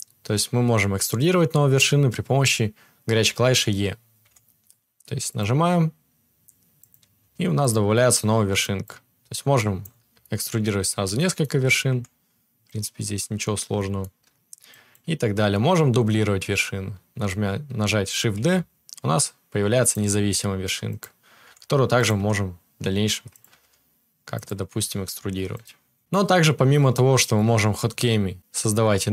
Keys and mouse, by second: 4.3 e, 5.4-8.6 middle drag, 5.5 r, 7.2 g, 8.6-12.8 drag, 11.8 e, 12.8-14.7 middle drag, 14.7-20.0 drag, 18.3 shift+d, 20.0-29.1 middle drag, 20.1 r, 21.4 e, 22.1 r, 23.5 g, 24.7 e, 26.7-29.1 drag.